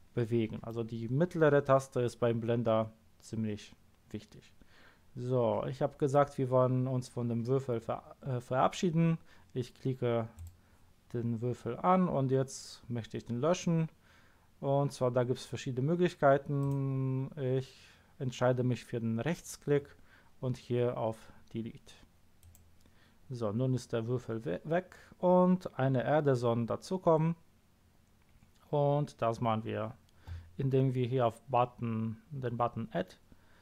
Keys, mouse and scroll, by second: 10.3 click, 16.6 right click, 22.4 click.